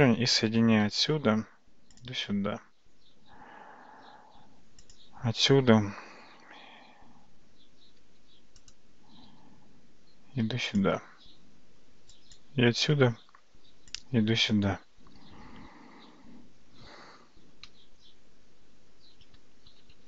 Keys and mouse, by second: 0.9 e, 5.6 r, 9.3 e, 12.2 click, 12.8 e, 17.7 a, 19.8 ctrl+z, 20.0 ctrl+z.